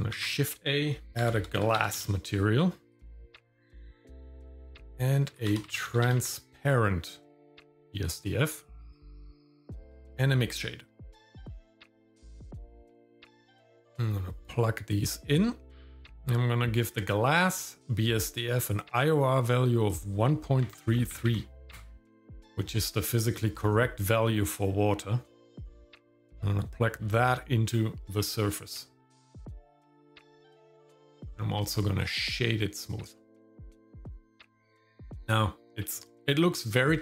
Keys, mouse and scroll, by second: 0.1 shift+a, 2.0 s, 4.6 shift+a, 8.8 shift+a, 13.7 click, 15.3 click, 19.9-21.8 drag, 21.3 KP_3, 26.2-27.7 drag, 28.8 scroll down 1, 29.2 shift+middle click, 29.8 scroll up 1, 30.2 shift+middle click, 30.8 click, 31.1 right click, 33.6 shift+middle click, 34.8 shift+middle click, 36.2 scroll down 1, 36.6 shift+middle click.